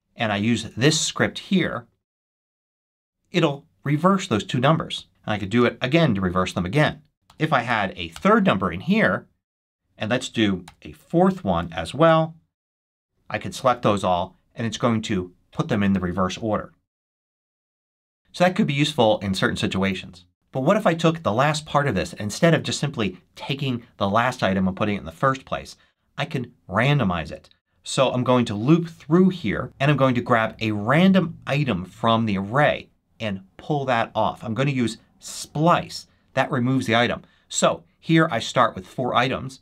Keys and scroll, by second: 0.5 super+s, 2.6 shift+super+1, 6.4 shift+super+1, 7.2 6, 8.0 Return, 10.6 8, 12.0 Return, 20.3 super+c, 27.1 super+v.